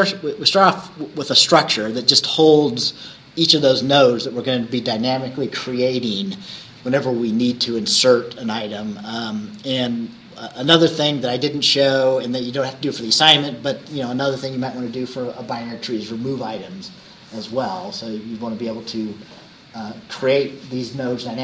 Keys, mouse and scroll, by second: 0.5 scroll up 2, 1.3 scroll down 2, 1.6-10.4 drag.